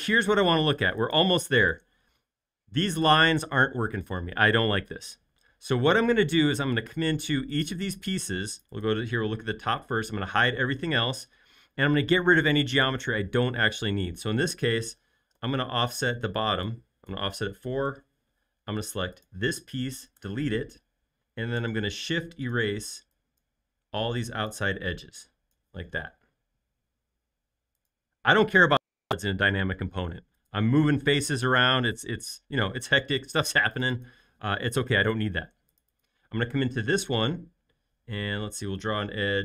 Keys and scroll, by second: 10.1 shift+q, 15.7 f, 17.7-18.7 typing, 17.8 Return, 20.1-21.5 typing, 26.2 space, 26.7 space, 38.4 |.